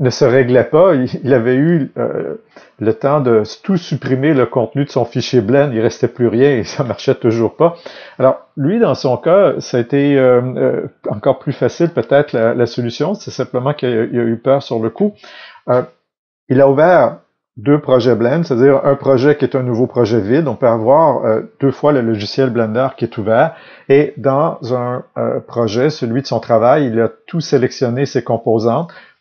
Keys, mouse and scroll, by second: 0.0-29.2 drag.